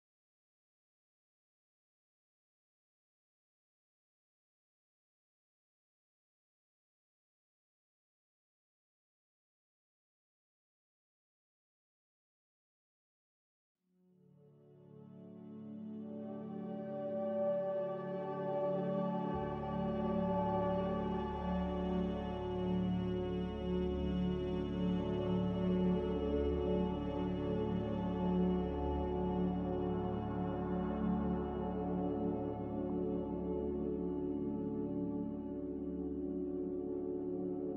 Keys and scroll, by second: 5.2 b, 18.3 b, 30.0 a, 31.6 typing, 35.3 b.